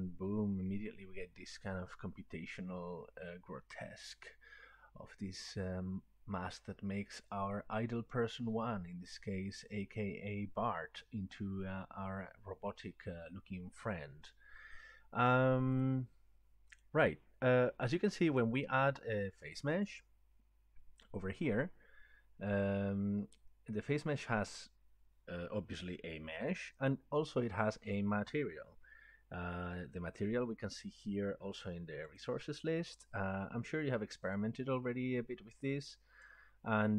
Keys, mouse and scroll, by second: 15.9 click, 18.4 click, 19.9 click, 32.3 click, 35.3 click.